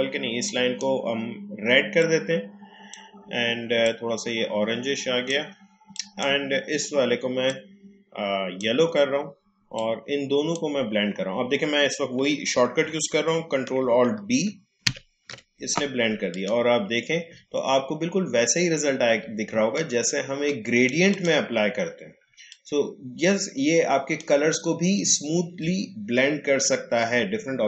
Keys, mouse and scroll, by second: 14.8 ctrl+alt+b, 16.3 click, 17.6 alt+scroll up 1, 18.6-18.9 alt+scroll down 1, 19.5 space, 19.7 click, 20.0 space, 22.5 click, 22.8 space, 25.2-25.5 alt+scroll down 1.